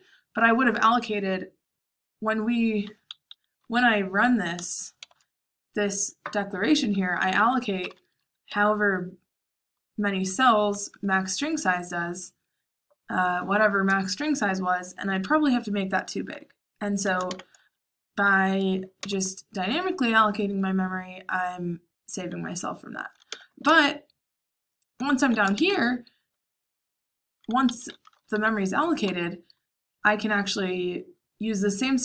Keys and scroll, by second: 3.2 Escape, 3.5 k, 4.9 shift+v, 7.5-9.8 typing, 17.2 shift+v, 19.0 j, 23.2-25.5 typing, 27.6 Escape, 27.9-30.3 typing.